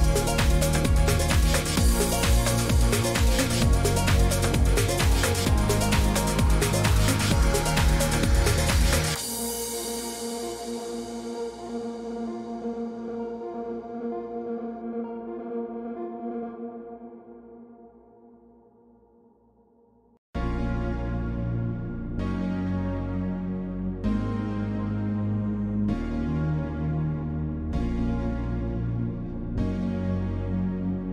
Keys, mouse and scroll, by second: 1.0 click, 1.9 click, 4.1 click, 4.5 click, 5.6 click, 9.2 click, 9.7-14.2 typing, 12.8 click, 18.2 click, 18.7 typing, 19.1 click, 20.6 click, 23.2 y, 25.4 middle click, 27.3 click, 28.0-29.4 scroll down 16, 29.4 click, 29.4-30.3 scroll, 30.1-31.1 typing, 30.8 right click.